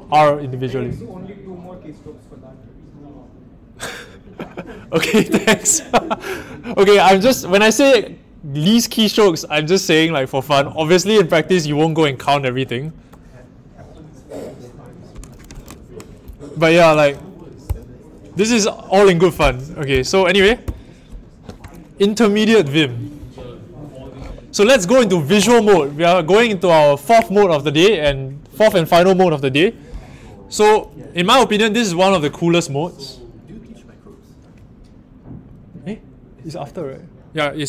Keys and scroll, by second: 17.6 ctrl+alt+Left, 19.8 ctrl+alt+Return.